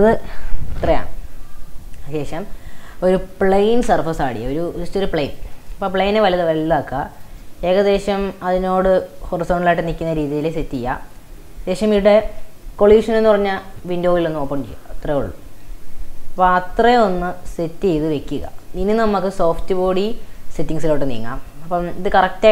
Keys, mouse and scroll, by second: 2.9 shift+a, 5.7-6.2 shift+middle drag, 6.2 s, 7.5-10.4 middle drag, 10.4 click, 14.4-16.4 drag, 16.4-20.0 middle drag, 20.0 click, 20.9-22.5 shift+middle drag.